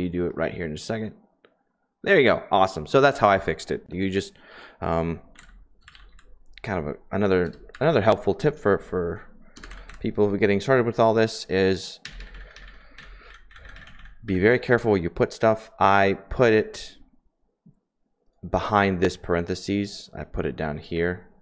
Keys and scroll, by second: 5.4-6.1 typing, 7.4-8.0 typing, 9.5-9.8 typing, 12.0 Page_Down, 12.1 Page_Down, 12.3 Page_Down, 13.2 Page_Down, 13.4 Page_Down, 13.6 Page_Down, 13.7 Page_Down, 13.9 Page_Down, 14.2 Page_Down, 21.1 i.